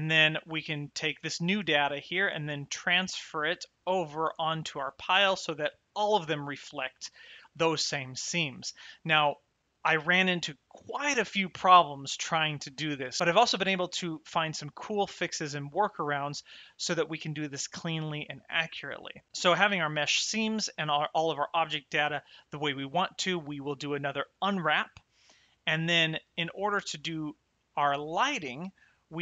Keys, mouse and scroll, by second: 0.0 middle click, 1.9 shift+middle click, 3.0 middle click, 26.5 shift+middle click, 27.4 middle click.